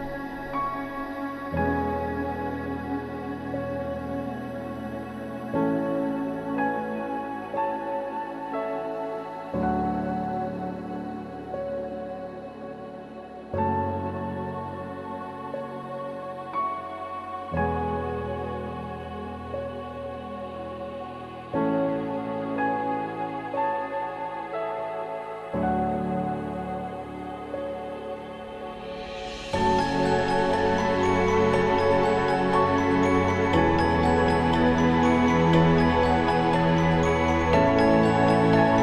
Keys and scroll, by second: 6.5 ctrl+z, 10.2 ctrl+z, 12.2 ctrl+z, 13.6 ctrl+z, 16.8 ctrl+z, 27.3 ctrl+z, 38.6 ctrl+z.